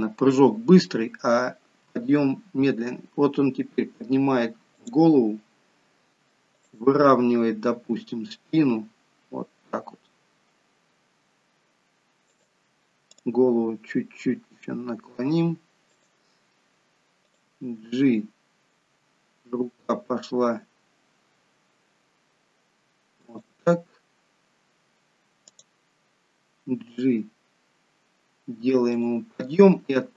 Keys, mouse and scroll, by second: 1.7 r, 6.6 click, 7.7 r, 13.0 click, 14.3 r, 17.1 click, 18.8 g, 25.3 click, 26.8 g.